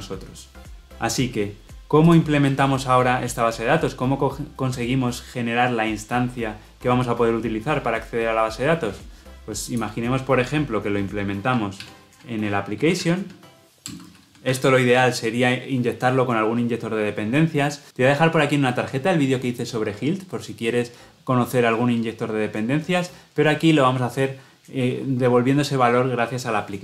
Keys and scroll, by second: 11.8 alt+Insert.